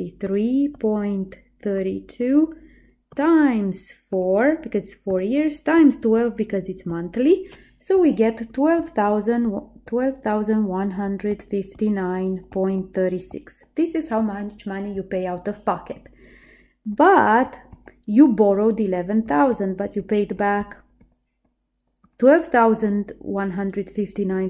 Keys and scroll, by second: 0.3 3, 0.8 ., 1.9 3, 2.3 2, 4.2 4, 5.9 1, 6.2 2, 7.0 Return.